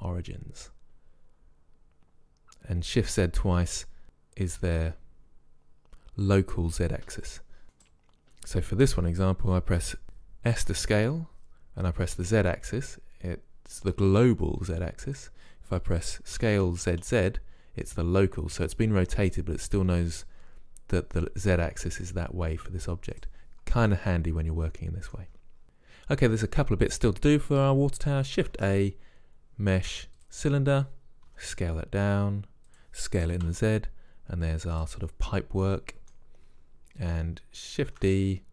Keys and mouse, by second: 7.8-9.7 right drag, 10.7 s, 16.5 s, 24.0-25.6 middle drag, 27.0-28.9 drag, 28.6 shift+a, 31.4 s, 33.3 s, 35.7-36.9 drag, 37.9 shift+d.